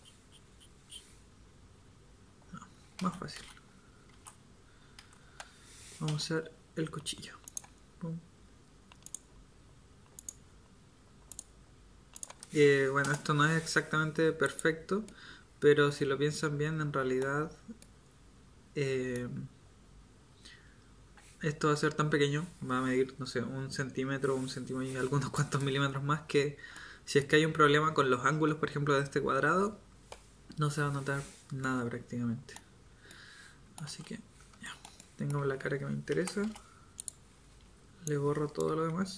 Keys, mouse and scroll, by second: 3.0 ctrl+z, 4.1 ctrl+z, 4.9 z, 6.1 k, 17.8-26.9 middle drag, 31.6 middle click, 33.8 z, 36.1 z, 36.4 v, 37.5 b.